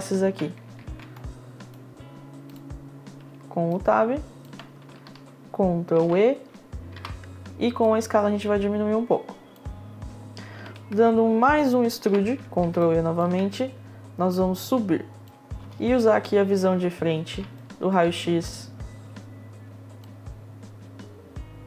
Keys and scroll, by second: 5.4 Tab, 6.4 e, 7.3 r, 11.6 e, 15.2 space, 16.0 space.